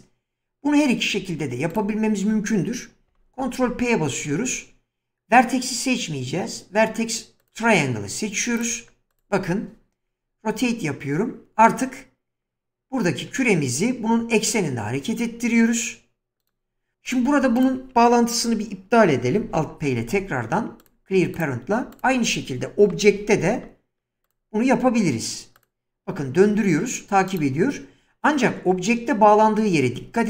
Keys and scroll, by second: 3.1 ctrl+p, 10.5 r, 19.5 alt+p, 22.9 ctrl+p, 26.5 r, 29.9 <.